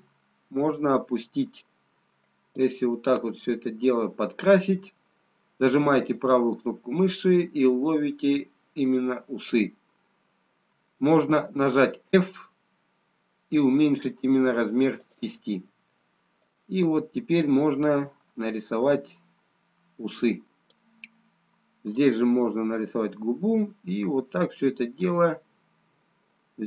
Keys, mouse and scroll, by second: 3.7 click, 7.4 right click, 12.7 f, 17.8 click.